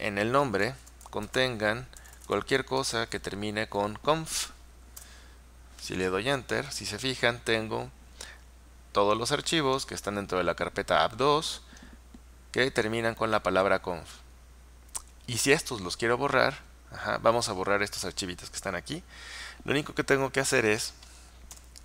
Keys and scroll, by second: 0.0-2.9 typing, 4.3-5.1 typing, 5.1 Return.